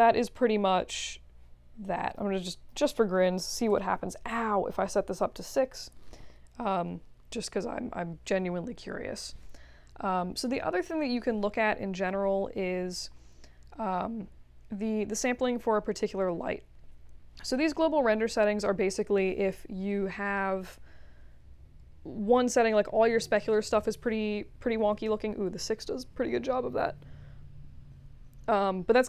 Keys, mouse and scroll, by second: 1.9 drag, 2.4 click, 3.2 6, 3.7 Return.